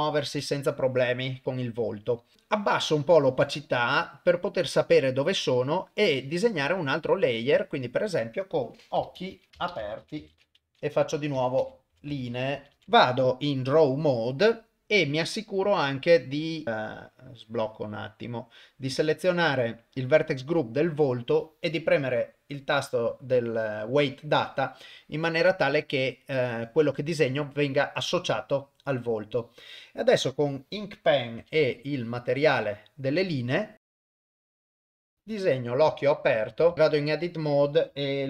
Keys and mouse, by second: 0.2 shift+Left, 3.0-5.7 drag, 7.1 click, 7.8-12.8 drag, 9.2 c, 12.1 e, 12.7 Left, 12.8 ctrl+Tab, 15.6 middle click, 16.6 click, 16.8 click, 20.6 click, 20.6 middle click, 22.2 click, 31.4 u, 33.7 ctrl+shift+z, 33.7 shift+click, 34.3 ctrl+z, 34.3 shift+click, 34.6 ctrl+z, 34.7 shift+click, 36.6 Tab, 36.7 Tab, 37.2 click.